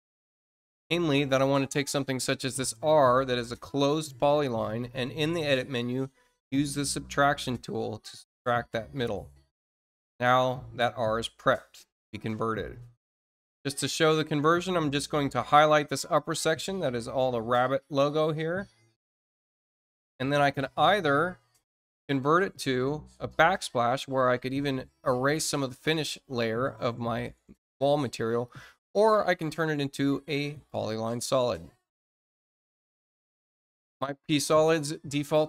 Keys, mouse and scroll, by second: 0.9 middle click, 1.6 middle click, 2.8 click, 6.4 click, 8.1 click, 10.8 scroll up 1, 11.3-12.5 middle drag, 12.5-13.0 scroll down 2, 13.8 space, 14.7-16.3 drag, 21.8 click, 28.3 click, 30.6 click.